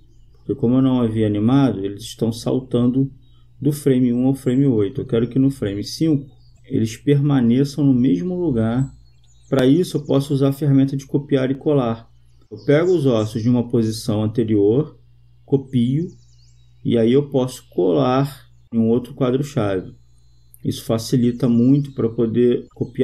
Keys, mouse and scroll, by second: 1.8-3.4 drag, 7.5 right click, 10.4-12.0 drag, 14.3-15.8 right drag, 18.3-20.8 drag, 19.4 right click, 20.9 click, 22.2 click.